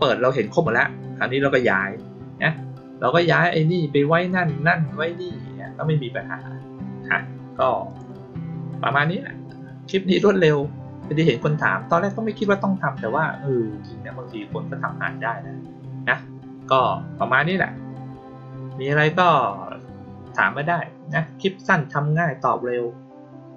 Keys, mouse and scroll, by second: 7.8 click.